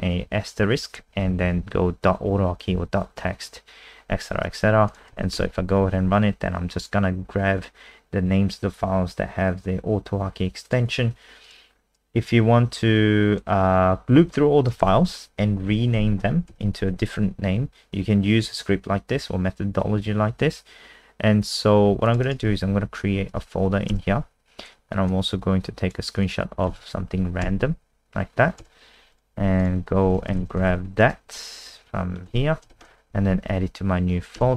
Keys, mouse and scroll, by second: 0.2 Right, 1.1 shift+Right, 1.3 shift+Right, 1.4 shift+Right, 1.6 shift+Right, 4.9 click, 5.1 ctrl+s, 5.3 F5, 10.6 click, 11.7-13.4 scroll down 3, 13.4 click, 14.8 ctrl+c, 15.1 click, 15.9 ctrl+a, 16.5 ctrl+v, 22.1 click, 22.2 right click, 22.5 w, 23.3 Return, 25.1 super+click, 26.2 click, 26.7 ctrl+s, 27.4 Return, 29.1 click, 29.3 Escape, 29.6 click, 30.0-31.3 typing, 31.8 End, 32.3 ctrl+x, 32.7 alt+Left, 33.1 Down, 33.2 Down, 33.4 Down, 33.6 Down, 34.4 Return.